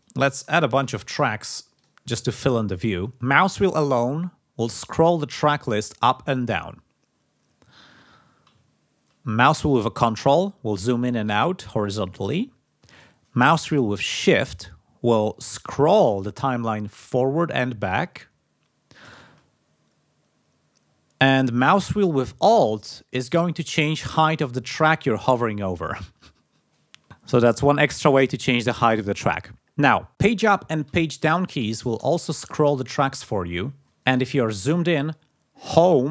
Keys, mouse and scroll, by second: 0.5-1.3 typing, 1.7 click, 4.1-5.0 scroll down 4, 5.5-6.3 scroll up 4, 6.4 scroll down 2, 7.1-7.8 scroll up 4, 8.1 scroll down 2, 8.6 ctrl+scroll up 2, 9.8-10.2 ctrl+scroll down 2, 10.5-11.0 ctrl+scroll up 2, 11.2-11.7 ctrl+scroll down 2, 11.9-12.4 ctrl+scroll up 2, 12.5 ctrl+scroll down 2, 14.1-14.5 shift+scroll up 2, 14.6-15.2 shift+scroll down 2, 15.6-16.0 shift+scroll down 2, 16.2-17.6 shift+scroll up 6, 17.8-18.1 shift+scroll down 2, 18.1-18.6 shift+scroll up 2, 19.6-20.1 alt+scroll up 2, 20.3-20.7 alt+scroll down 2, 20.8-21.2 alt+scroll up 2, 21.7-22.1 alt+scroll up 2, 22.1-22.4 alt+scroll down 2, 22.5-22.9 alt+scroll up 2, 23.1 alt+scroll down 2, 23.5 alt+scroll up 2, 24.2 alt+scroll up 2, 24.6-25.1 alt+scroll down 4, 27.3 alt+scroll down 2, 30.8 Page_Up, 31.6 Page_Down, 32.3 Page_Up, 34.3-34.7 ctrl+scroll up 2, 35.6 Home.